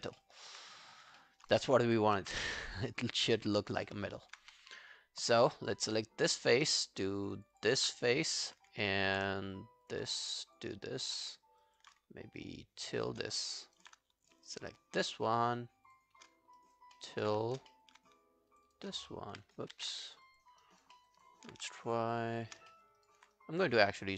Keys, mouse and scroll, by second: 0.2 alt+middle click, 0.4 alt+right click, 1.2 alt+middle click, 1.4 alt+right click, 2.0 ctrl+i, 2.6 alt+middle click, 2.8 alt+right click, 3.0 alt+click, 3.3 alt+middle click, 3.5 alt+right click, 3.9 alt+middle click, 4.1 alt+right click, 4.4 q, 7.4 shift+click, 7.6 shift+click, 8.1 alt+middle click, 9.9 shift+click, 10.5 shift+click, 11.3 alt+middle click, 11.7 alt+click, 12.9 shift+click, 13.0 shift+click, 13.4 alt+middle click, 13.6 alt+right click, 14.6 shift+click, 15.3 shift+click, 16.4 alt+scroll down 1, 16.6 alt+click, 17.0 alt+middle click, 17.7 alt+middle click, 18.5 shift+click, 18.7 shift+click, 19.1 alt+middle click, 19.8 ctrl+z, 20.1 scroll down 2, 20.3 alt+click, 20.6 alt+right click, 21.0 alt+middle click, 21.9 shift+click, 22.4 shift+click, 22.7 alt+middle click, 23.0 alt+right click, 23.4 right click.